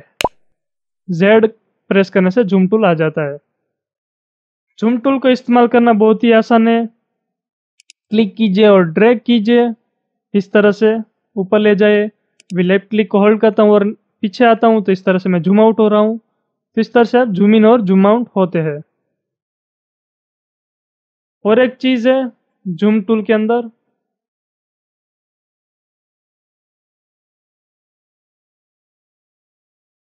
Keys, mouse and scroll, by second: 7.8-20.7 drag, 20.7-22.6 middle drag, 22.6 scroll up 7, 23.3 shift+middle click, 24.5-24.9 scroll up 7, 25.3 scroll up 7, 25.9 middle click, 26.5-29.0 shift+middle drag, 29.0-29.3 scroll down 2, 29.4 shift+middle click.